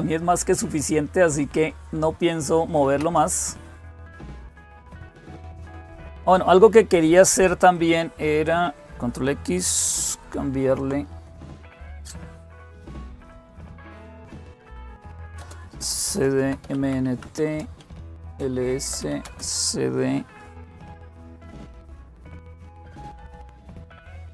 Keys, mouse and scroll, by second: 7.5 click, 10.3 ctrl+x, 12.9-13.8 typing, 14.1 Return, 14.8-19.2 typing, 17.2 Return, 21.1-24.3 typing.